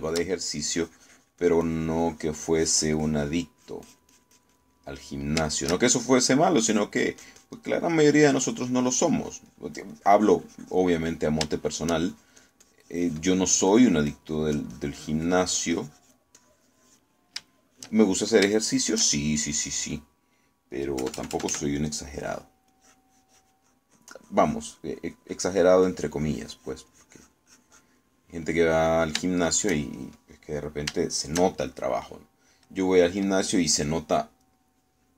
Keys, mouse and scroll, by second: 0.2 middle click, 0.8 shift+middle click, 1.6 shift+middle click, 1.8-4.6 shift+drag, 5.8 middle click, 6.6 shift+middle click, 7.8 click, 9.4-12.0 drag, 12.0 middle click, 12.6 shift+middle click, 13.2-17.4 shift+drag, 18.6 shift+middle click, 21.0 middle click, 22.0 KP_Add, 22.9 middle click, 23.8-26.8 drag, 26.9-29.0 drag, 29.2-30.2 middle drag, 30.4 shift+middle click, 31.4 shift+middle click, 32.2 shift+middle click, 33.7 middle click.